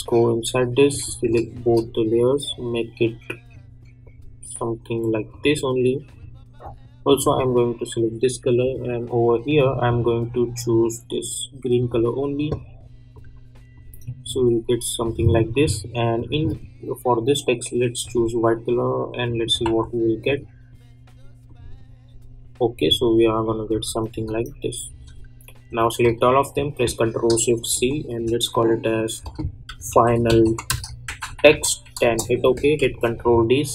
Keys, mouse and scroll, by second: 1.5 shift+click, 14.2 space, 16.1 click, 19.6 ctrl+z, 20.2 click, 22.8 space, 26.0 ctrl+a, 27.7 ctrl+shift+x, 29.4-32.0 typing, 32.8 ctrl+d.